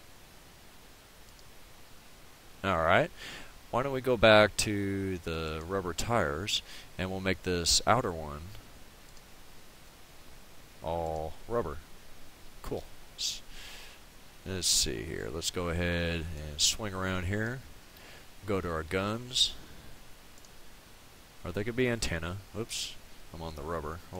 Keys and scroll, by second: 22.6 ctrl+z.